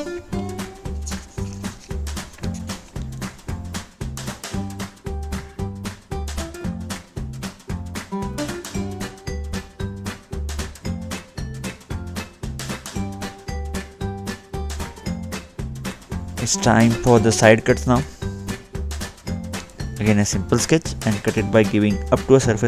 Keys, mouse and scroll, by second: 4.2 scroll up 2, 5.7 middle click, 6.5-7.0 scroll down 2, 7.9 middle click, 11.3 click, 13.6 click, 13.8-14.6 scroll up 1, 14.6-14.9 scroll down 1, 14.9 middle click, 15.4-15.7 scroll down 2, 18.6 click, 18.9-19.6 scroll down 2, 20.1 middle click, 20.6-21.2 scroll up 1, 21.2 click.